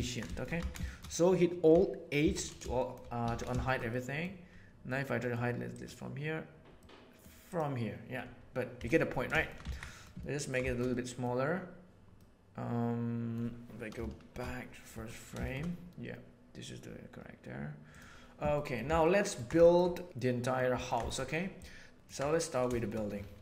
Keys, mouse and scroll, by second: 0.2 shift+middle click, 0.5 alt+a, 0.8 shift+middle click, 2.2 alt+h, 2.7 shift+middle click, 3.6 shift+middle click, 3.9 middle click, 4.9 middle click, 5.7 click, 6.7 middle click, 8.7 x, 9.3 shift+middle click, 9.7 alt+a, 9.9 middle click, 10.1-10.5 ctrl+middle drag, 10.7 shift+middle click, 10.9 middle click, 12.1-13.3 middle drag, 14.1 shift+Left, 14.3 shift+Left, 14.9 middle click, 18.5 middle click, 19.0-19.4 ctrl+middle drag, 19.6 shift+middle click, 20.0-20.6 middle drag, 22.1-22.5 middle drag, 22.7 shift+middle click.